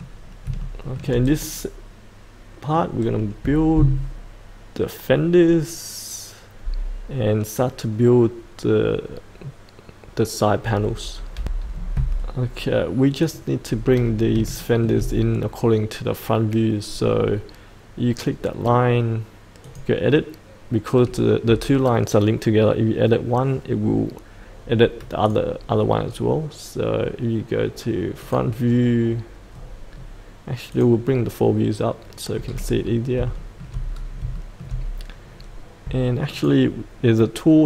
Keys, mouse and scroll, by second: 0.6 shift+middle click, 1.4 middle click, 11.3 F8, 12.2-13.2 scroll down 1, 13.2 click, 14.6 shift+middle click, 19.6 click, 25.9-28.2 scroll down 1, 28.2 click, 29.5-30.7 scroll down 1, 30.7 click, 32.4-33.1 scroll up 1, 33.3 shift+middle click, 33.9 scroll up 1, 34.3 shift+middle click, 36.3 click.